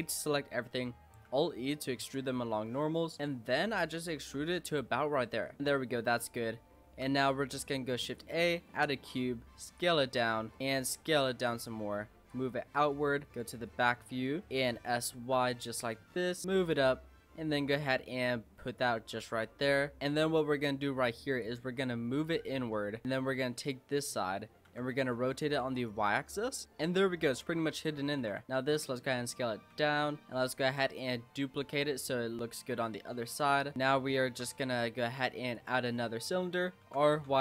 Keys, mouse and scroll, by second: 0.3 middle click, 0.6-1.3 scroll up 2, 1.3 alt+e, 4.2 Tab, 4.6-6.0 middle drag, 6.0-6.8 scroll up 2, 6.8 shift+a, 8.6-9.1 scroll down 6, 9.1 s, 10.1 middle click, 10.3 scroll up 1, 10.5 middle click, 10.6 s, 12.3 click, 13.3 click, 13.6-14.2 scroll up 7, 14.2 shift+middle click, 14.6 s, 16.4 s, 17.5 click, 19.1 s, 20.0-21.4 middle drag, 21.4 click, 22.5 middle click, 23.0 click, 24.2 middle click, 24.7 r, 26.5 click, 26.6-27.8 middle drag, 27.8 click, 28.2 s, 29.7 l, 30.1 middle click, 30.7 shift+d, 31.6 click, 33.3 click, 33.7 scroll up 1, 33.7 middle click, 34.3 shift+a, 35.9-36.8 scroll down 7, 36.8 r.